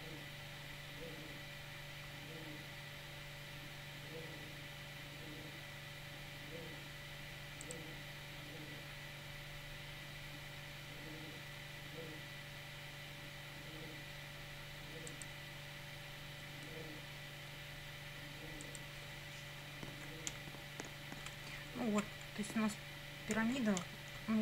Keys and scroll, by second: 19.7 Up, 20.3 Down, 21.6 Right, 22.3 Up, 24.2 Down.